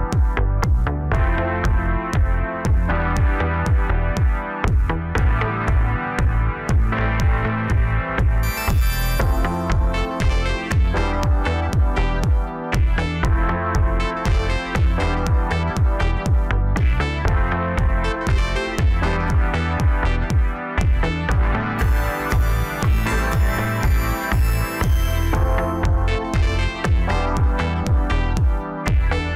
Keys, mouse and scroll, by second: 0.8 i, 4.9-7.2 middle drag, 7.2 e, 9.6-11.8 middle drag, 11.8 KP_7, 12.5-13.6 scroll down 2, 13.6 ctrl+r, 16.3 1, 18.0 click, 19.0 click, 23.4 middle click, 24.2 Tab, 25.2 click, 25.5-27.2 middle drag, 27.2 click.